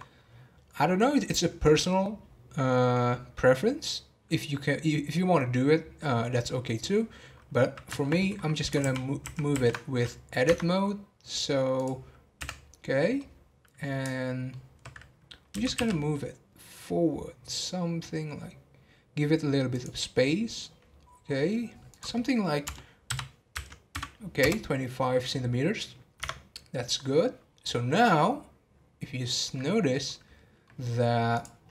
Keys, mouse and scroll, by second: 6.3-10.5 middle drag, 10.5 Tab, 13.1-18.4 middle drag, 28.0-31.3 middle drag, 31.3-31.7 drag.